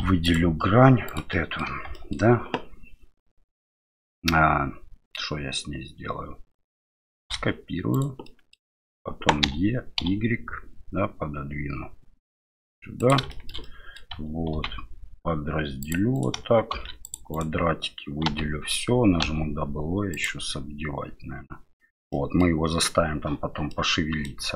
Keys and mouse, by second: 0.2 right click, 1.1 right click, 1.3 middle click, 1.9 middle click, 7.2 shift+d, 8.4 middle click, 9.4 e, 13.4 shift+middle click, 13.7 middle click, 14.5 ctrl+r, 18.3 l, 19.2 w, 22.2 middle click, 23.8 middle click.